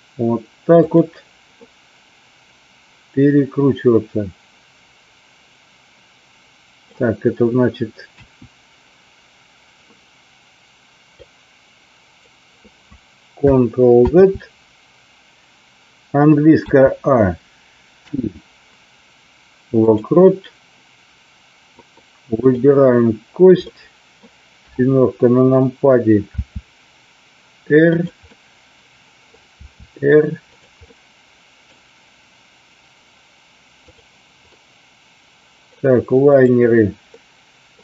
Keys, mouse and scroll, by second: 0.9 click, 1.5-8.1 middle drag, 8.1 KP_1, 11.0-12.1 drag, 14.2 ctrl+z, 16.6 a, 17.9 i, 22.4 click, 23.6-24.1 middle drag, 24.6 KP_7, 26.3 r, 28.2-29.3 middle drag, 30.5 click, 30.9-31.7 middle drag, 33.7 click, 34.5-35.7 middle drag, 36.2 click, 37.1 middle click.